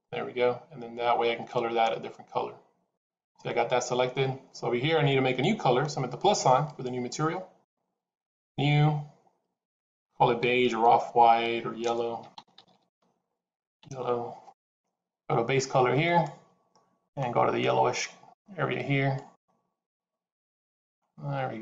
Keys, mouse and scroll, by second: 3.4 middle click, 6.6 click, 8.2 click, 12.6 l, 16.0 click.